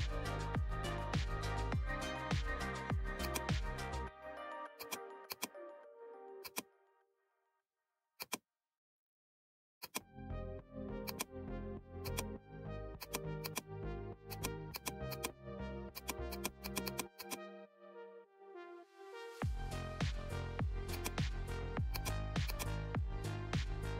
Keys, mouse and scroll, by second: 0.0-0.1 typing, 3.1 click, 4.7 click, 7.3 right click, 8.1 click, 9.8 click, 18.4 ctrl+z, 20.8 click.